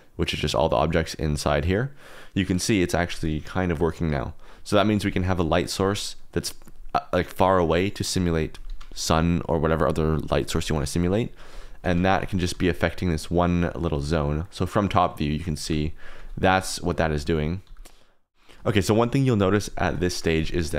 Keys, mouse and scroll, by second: 3.5 shift+click, 5.2 click, 5.7 g, 8.6 Escape, 11.5 g, 11.8 Escape, 12.1 r, 12.5 g, 12.9 click, 13.5 r, 13.8 click, 14.4 middle click, 15.6-17.6 typing, 16.4 click, 16.9 click, 17.4 click, 18.6 shift+click, 19.8 shift+click.